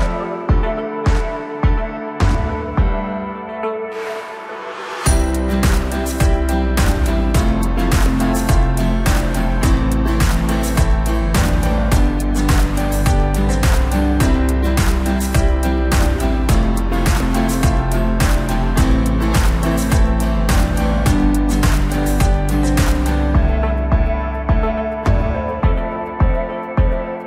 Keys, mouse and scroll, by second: 3.0-3.5 drag, 3.5-3.9 scroll up 2, 3.9-4.5 right drag, 4.5-5.0 scroll down 1, 5.0-6.6 middle drag, 6.6 KP_1, 7.2 scroll up 2, 7.5 Tab, 9.2 drag, 10.1-13.1 middle drag, 13.1 shift+click, 13.6 shift+click, 13.7 shift+click, 14.5 KP_1, 15.3-15.9 scroll up 1, 15.9 g, 21.3 Tab, 21.7-22.7 scroll down 1, 22.7-23.2 scroll up 2, 23.2-24.0 scroll down 2, 24.0-25.6 middle drag, 25.6 KP_1, 26.5-26.9 scroll up 1, 26.9-27.2 scroll down 1.